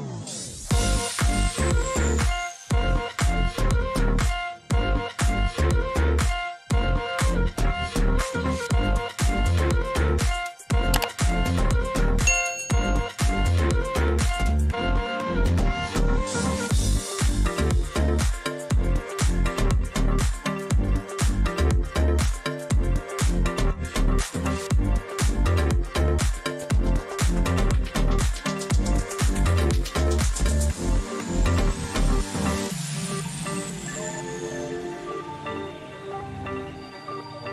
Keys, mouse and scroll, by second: 1.8-2.8 drag, 3.2 click, 3.8 ctrl+shift+], 13.1-14.8 drag, 14.2 ctrl+g, 16.6 click, 17.6-18.8 shift+drag, 19.7-20.6 drag, 20.8 click, 22.6 click, 23.5 click, 23.8-24.5 Down, 25.4 click, 28.1 click, 29.9 click, 31.3 click, 32.1 ctrl+c, 32.7 click, 33.8-34.7 drag, 34.6 ctrl+v.